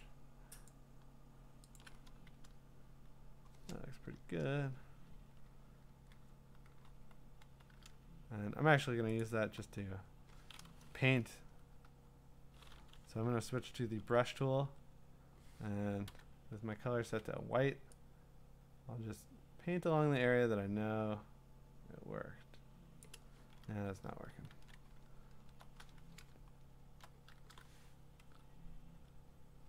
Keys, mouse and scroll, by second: 0.0 shift+click, 0.7 alt+click, 1.8 alt+click, 5.8 ctrl+Return, 6.8 q, 7.4 q, 9.3 click, 9.3-11.8 typing, 13.2-14.0 ], 14.2 ], 14.4 ], 14.7 ], 16.0-17.7 typing, 23.1 click, 23.7 ctrl+z, 24.5 ctrl+d, 25.0-26.2 scroll, 26.4-26.9 scroll.